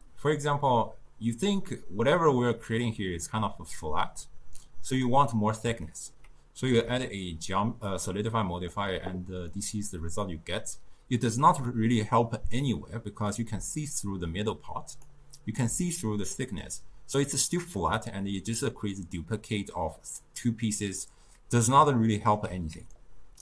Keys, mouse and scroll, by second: 5.9-6.9 ctrl+middle drag, 6.9-9.5 shift+drag, 9.5-12.6 middle drag, 13.5 d, 14.0 d, 14.1-15.1 drag, 15.1-15.4 d, 21.9-22.8 ctrl+middle drag, 22.8 d, 23.0 right click.